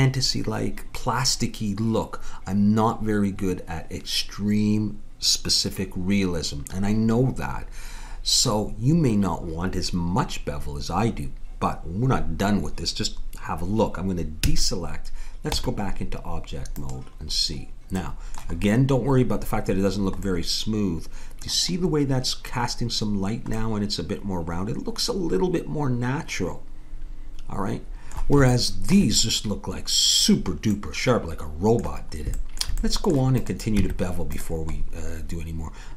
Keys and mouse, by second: 14.4 a, 15.6 Tab, 28.5-33.3 middle drag, 33.3-34.4 drag, 33.8 Tab.